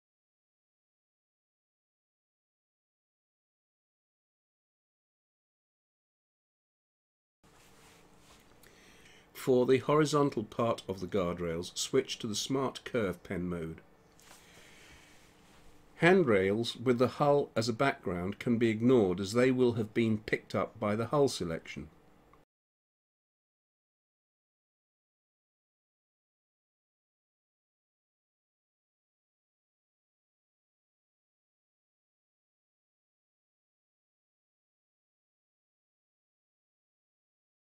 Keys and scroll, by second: 7.0 space, 24.1 space, 26.2 ctrl+z, 28.6 ctrl+z, 33.2 space, 35.3 Escape, 36.8 ctrl+z, 37.0 ctrl+z.